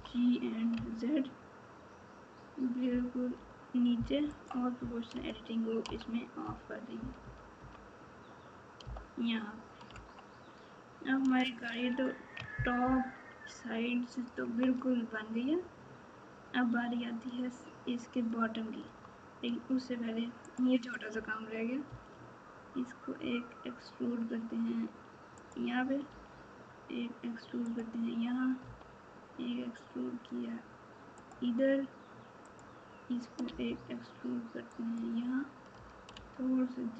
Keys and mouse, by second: 9.8 Tab, 11.7 alt+z, 12.8 ctrl+KP_4, 13.3 ctrl+KP_4, 21.8 e, 26.0 e, 33.4 e, 35.7 g.